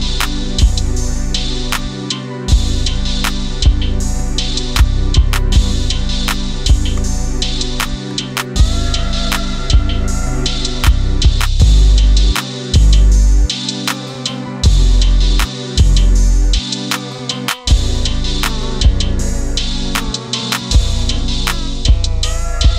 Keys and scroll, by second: 1.8 space.